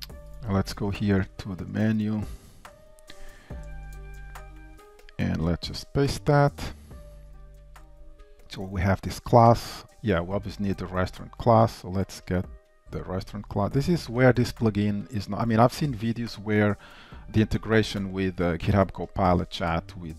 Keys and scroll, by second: 1.0 super+1, 2.2 Down, 4.0 alt+Insert, 4.0 super+n, 6.8 super+v.